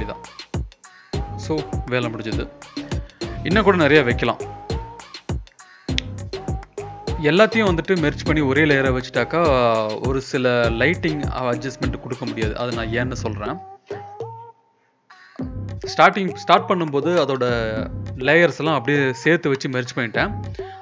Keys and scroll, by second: 1.9 ctrl+[, 3.8 ctrl+[, 8.9 ctrl+t, 13.1 Escape, 13.7 ctrl+t, 20.3 ctrl+[.